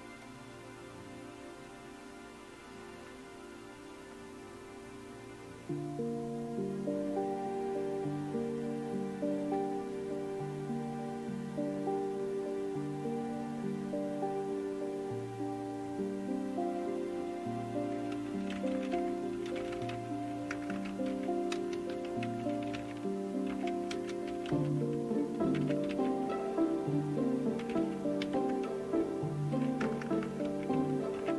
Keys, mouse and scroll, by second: 18.3-20.4 typing, 21.5-23.5 typing, 25.7 typing, 27.7-28.2 typing, 29.8-30.4 typing.